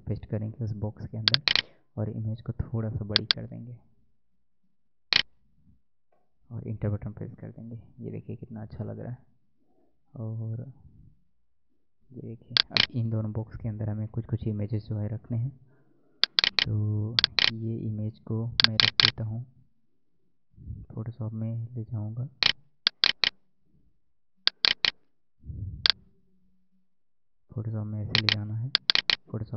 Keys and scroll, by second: 14.1 Tab.